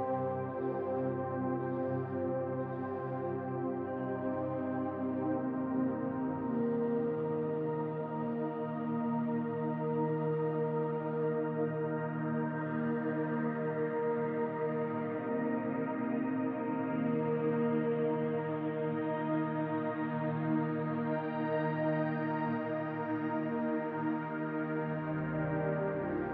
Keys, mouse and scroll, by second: 2.1 middle click, 2.5-4.0 drag, 4.0-5.5 middle drag, 5.5 click, 6.2-7.2 shift+middle drag, 6.8-7.2 scroll up 2, 7.2 click, 8.0 middle click, 8.3 click, 8.9 shift+middle click, 9.4 click, 10.0 middle click, 10.5 click, 11.2 middle click, 11.6-13.2 drag, 13.0 scroll down 2, 13.2-24.4 middle drag, 13.8 scroll down 2, 14.9 scroll down 2, 15.4-16.1 scroll up 2, 16.1-16.7 scroll up 1, 19.2-19.5 scroll up 2, 20.3 scroll down 2, 21.0 scroll down 2, 21.7-22.2 scroll up 2, 22.2 scroll up 1, 26.1 click.